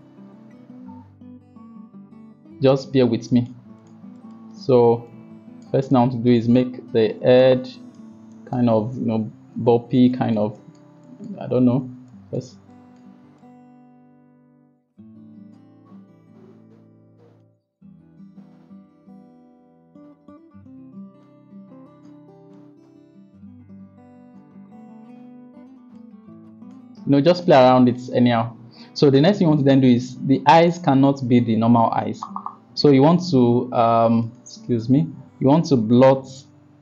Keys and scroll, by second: 0.0-1.0 typing, 2.1 ], 9.6-10.0 typing, 11.4 ], 11.6 ], 11.8 ].